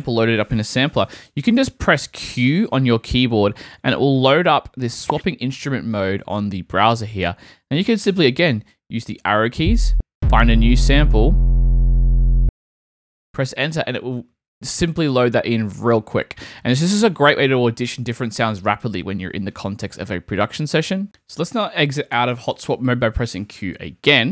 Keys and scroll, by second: 0.9 q, 9.3 Down, 12.3 Return, 24.1 q.